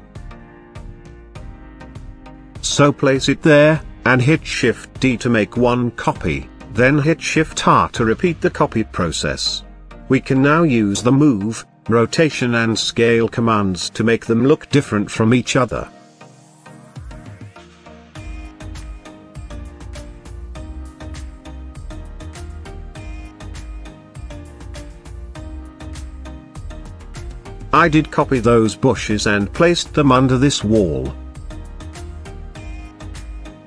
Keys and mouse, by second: 0.0 KP_Decimal, 0.7 middle click, 1.4 g, 1.6 z, 2.2 click, 2.7 middle drag, 3.4 g, 3.7 shift+z, 4.5 click, 5.2 shift+d, 5.6 y, 6.6 click, 7.3 shift+r, 7.6 shift+r, 8.9 shift+r, 9.3 click, 10.6 shift+click, 11.9 g, 12.1 x, 14.4 shift+click, 15.0 shift+click, 15.6 r, 15.7 z, 16.7 click, 17.6 s, 18.4 click, 19.6 ctrl+drag, 20.3 s, 21.3 click, 21.5 r, 21.8 z, 22.1 click, 23.0 shift+drag, 23.4 shift+click, 24.8-25.1 middle drag, 25.5 shift+middle drag, 26.2 shift+d, 26.4 shift+z, 27.7 x, 28.6 drag, 28.8-29.2 middle drag, 29.4 shift+middle click, 30.7 click, 31.0 s, 31.6 click, 32.6 shift+d, 33.2 y.